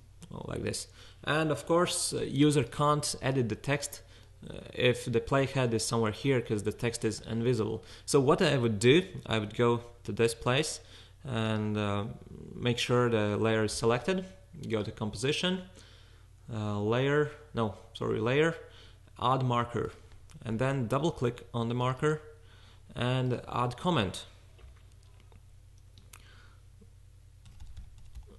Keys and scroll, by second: 27.2-28.3 typing.